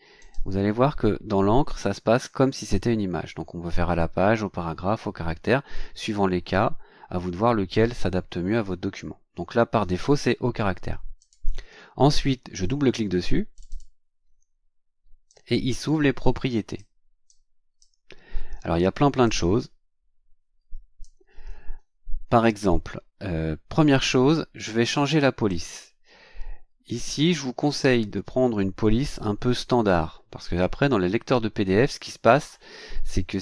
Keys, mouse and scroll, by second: 0.2 right click, 11.2 click, 13.5 click, 15.3-17.0 drag, 17.3 click, 19.2-21.2 drag, 25.5 click.